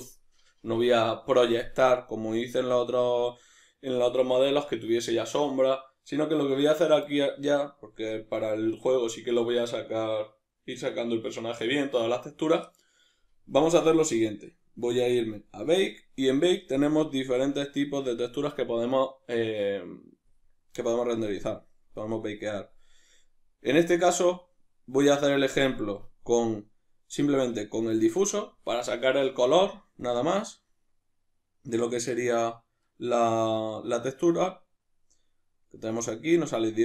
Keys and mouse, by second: 15.5-16.7 middle drag, 16.7-36.8 drag.